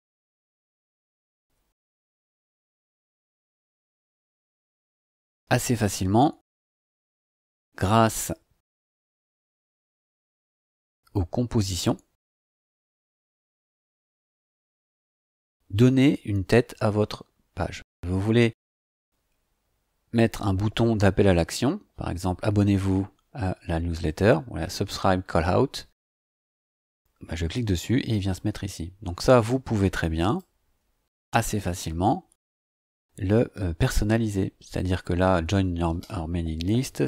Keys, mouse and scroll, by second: 0.0-5.0 typing, 9.4 click, 10.3 click, 12.7 click, 14.5 click, 26.1 click, 30.2 click, 36.8 Delete.